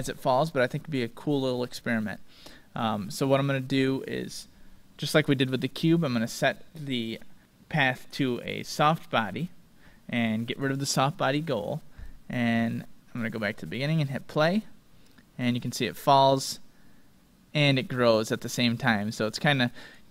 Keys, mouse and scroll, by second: 0.3-2.9 drag, 3.3-5.0 drag, 5.8-7.4 drag, 8.7-10.4 drag, 11.9 click, 13.2-15.8 drag, 19.2-20.1 drag.